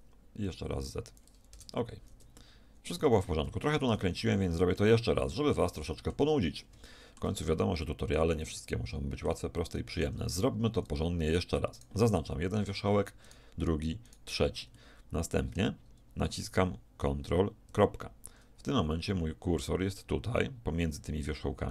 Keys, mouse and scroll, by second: 2.3 middle click, 3.0 a, 3.9 z, 6.7 middle click, 7.7 middle click, 8.5-11.1 middle drag, 11.7-14.8 right drag, 14.8-16.3 middle drag, 17.7 ctrl+..